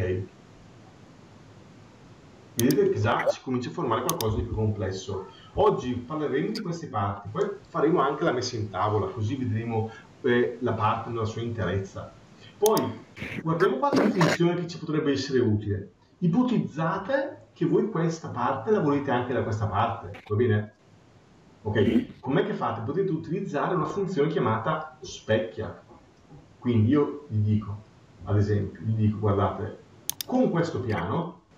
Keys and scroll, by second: 4.3 ctrl+1, 5.6 ctrl+2.